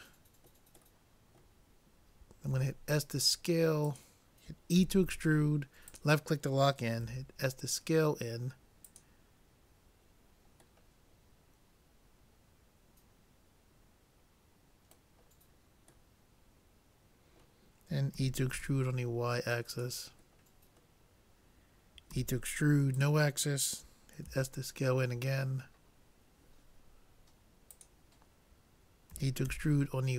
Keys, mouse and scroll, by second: 2.5 s, 4.8 e, 7.1 s, 10.9-12.6 middle drag, 15.3-17.9 middle drag, 18.2 e, 20.4-22.1 middle drag, 22.1 e, 24.3 s, 29.2 e.